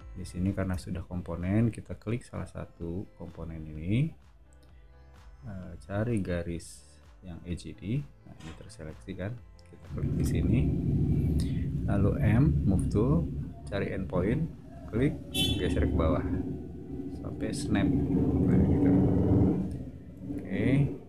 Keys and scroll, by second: 0.6 space, 12.1 m, 18.8 typing.